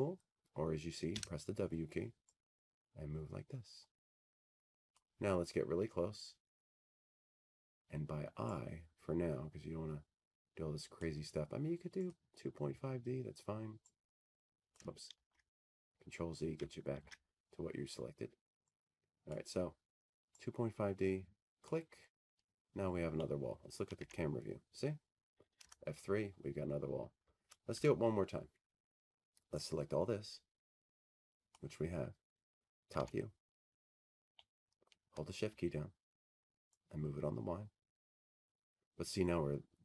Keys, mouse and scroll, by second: 1.7 t, 2.6-3.6 scroll, 6.7 w, 10.5 click, 11.1-12.3 scroll, 12.3 scroll, 16.5 click, 17.8 click, 20.4 click, 20.8 ctrl+z, 22.7 ctrl+z, 25.0 click, 27.4-28.6 scroll, 28.6 middle click, 29.5 middle click, 29.7-30.7 scroll, 31.2 F3, 33.5 F3, 37.1 click, 38.5 t, 39.5 middle click.